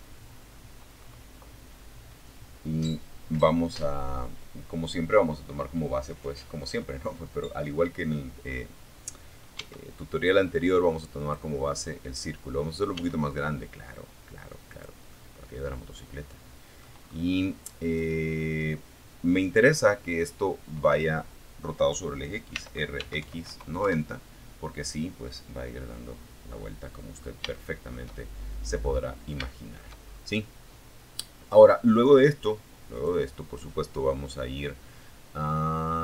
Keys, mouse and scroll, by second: 6.7-7.0 scroll up 2, 7.1 scroll down 2, 7.7 s, 9.3 click, 11.1 s, 12.9 click, 13.3-15.2 drag, 15.4 scroll up 1, 16.0 right click, 20.9 r, 21.1 x, 21.4 KP_9, 21.7 KP_0, 22.0 KP_Enter, 24.7 middle click, 25.7 shift+middle click, 26.4 shift+middle click, 26.8 click, 27.3 scroll down 2, 27.7 shift+click, 28.3 shift+scroll up 2, 31.1 click, 35.6 click.